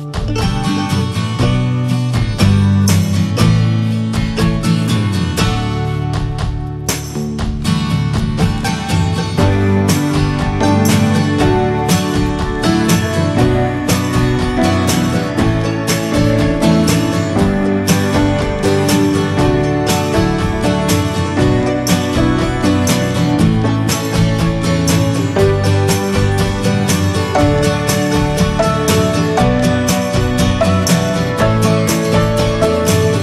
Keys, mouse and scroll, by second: 0.1 Tab, 0.7 ctrl+a, 1.3 middle click, 1.4 Tab, 1.6 scroll up 1, 1.9 middle click, 2.6 ctrl+b, 5.5 click, 5.8 middle click, 6.7 s, 7.9-9.1 shift+middle drag, 9.1 s, 9.8 alt+middle click, 10.5 shift+middle click, 11.0 e, 13.6 middle click, 14.2 ctrl+b, 16.4 click, 16.8 alt+middle click, 17.7 scroll up 2, 18.1 middle click, 19.7 alt+middle click, 20.6 e, 21.9 e, 23.5 scroll down 2, 23.6 shift+middle click, 24.3 s, 26.2 scroll down 1, 26.4 shift+middle click, 26.8 click, 27.6 s, 28.1 scroll down 1, 28.3 shift+middle click, 28.6 e, 32.0 3, 32.8 click.